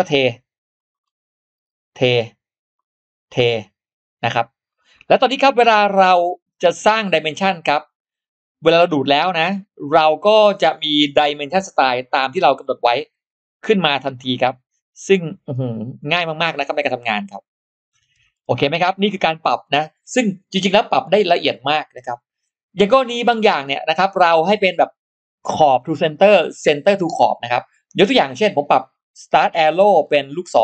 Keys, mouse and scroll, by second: 0.2 click, 0.8-1.1 scroll down 2, 1.9 click, 3.2 click, 4.1 scroll up 2, 4.5-5.1 scroll down 2, 7.0 click, 10.1 click, 10.5-11.1 scroll up 1, 11.7 click, 13.9 click, 15.0 click, 15.2 click, 15.8 scroll up 2, 17.0 click, 17.1 click, 18.1 scroll down 2, 22.7-23.0 scroll up 2, 23.9 click, 23.9 space, 29.3 click.